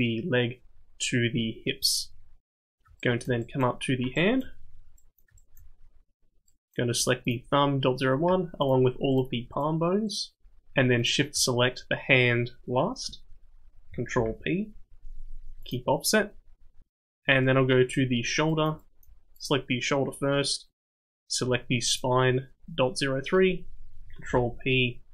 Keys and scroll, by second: 14.2 ctrl+p, 24.3 ctrl+p.